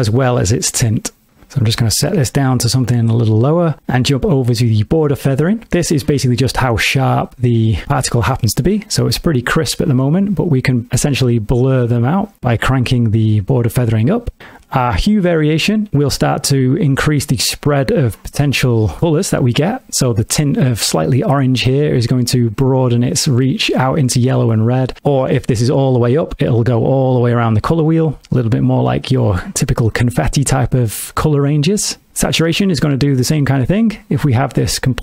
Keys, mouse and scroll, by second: 1.5 click, 10.9 click, 14.4 middle click, 16.3 click, 21.6 click, 24.8 click, 26.5 click, 31.4 click, 34.0 click.